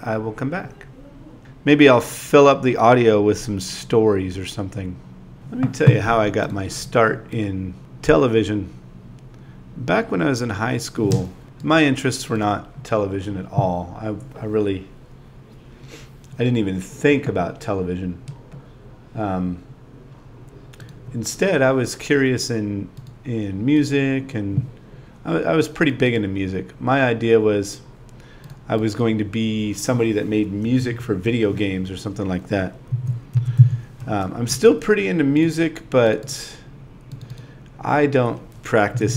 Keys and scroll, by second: 1.9 shift+c, 2.9 i, 4.0 space, 5.4-7.0 typing, 9.4 super+v, 10.5 0, 13.5 space, 14.0 space, 15.8 super+v, 17.3 shift+t, 17.6 0, 18.3 4, 19.7 space, 20.0 space, 20.2 9, 20.5 ., 22.6-23.7 typing, 25.1 2, 25.3 super+a, 25.5 shift+h, 26.3 space, 27.0 space, 28.0 4, 29.3-31.0 typing, 32.7 super+v, 33.7 p, 35.3 BackSpace, 35.8 0, 37.7 space, 38.2 space.